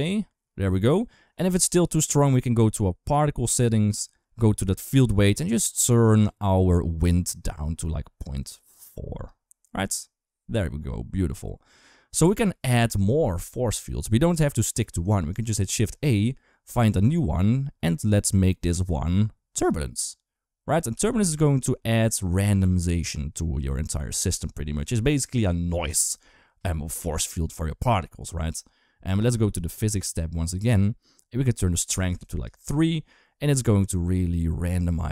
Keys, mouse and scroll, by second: 1.3 click, 3.3 click, 7.4-9.1 drag, 15.5 shift+a, 20.8 g, 29.8 click, 31.6 click.